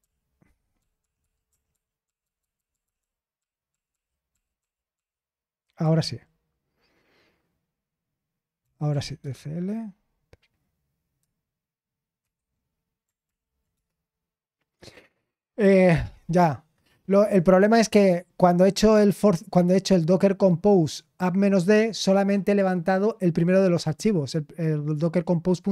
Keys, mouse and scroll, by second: 1.0 typing, 4.7-5.4 typing, 5.8 ctrl+r, 8.6-9.4 typing, 12.2 super+0, 13.2 ctrl+l, 13.7 Return, 15.9-16.4 typing.